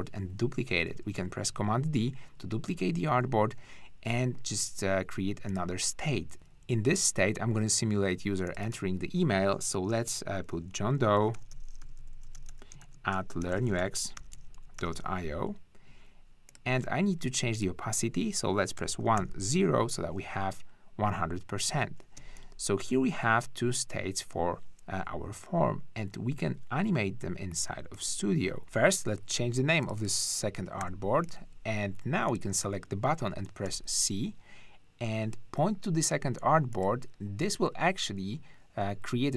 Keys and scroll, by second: 0.9 super+d, 6.3 super+`, 11.1-15.4 typing, 18.8 l, 19.2 0, 22.2 space, 28.6 `, 30.8 2, 33.6 c.